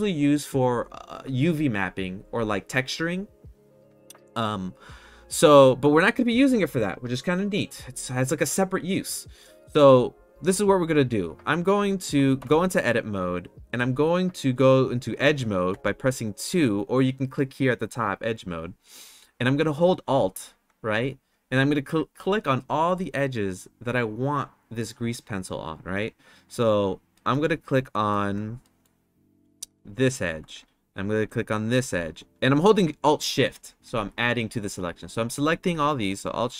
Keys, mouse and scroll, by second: 12.3 Tab, 15.7 2, 27.1 middle click, 27.9 middle click, 28.6 middle click, 29.8 alt+click, 36.1 middle click.